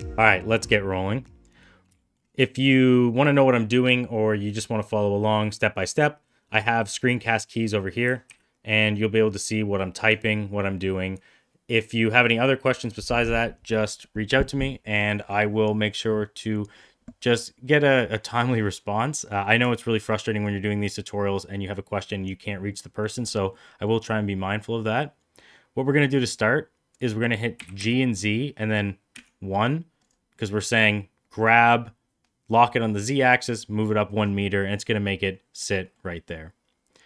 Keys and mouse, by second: 0.4 middle click, 1.0-1.4 middle drag, 2.7-3.0 middle drag, 6.2-7.0 middle drag, 8.0 d, 8.3 d, 9.8 middle click, 18.5 middle click, 19.6 shift+middle click, 23.4 middle click, 27.5 g, 35.1 middle click, 35.8 middle click.